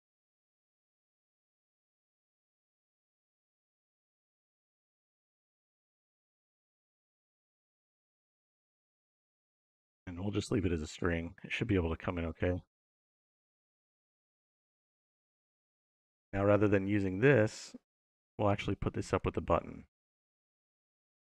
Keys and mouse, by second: 11.2 middle click, 11.9-13.6 drag, 14.3 middle click, 15.7-17.3 drag, 18.3 click, 19.7 click.